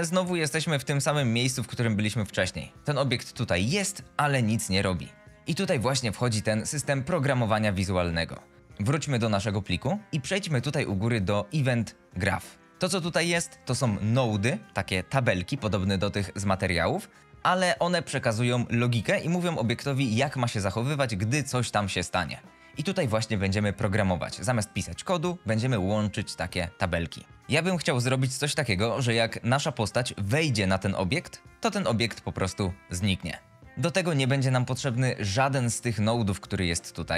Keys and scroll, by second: 0.0-3.4 typing, 5.3 shift+Escape.